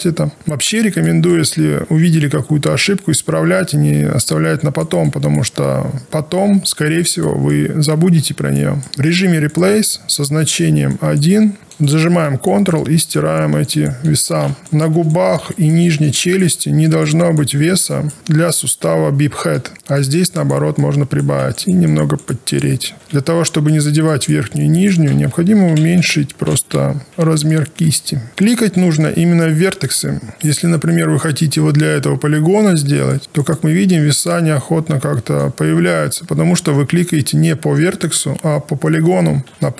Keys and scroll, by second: 25.1 ctrl+z, 27.3 b, 30.3 ctrl+z, 39.5 ctrl+z.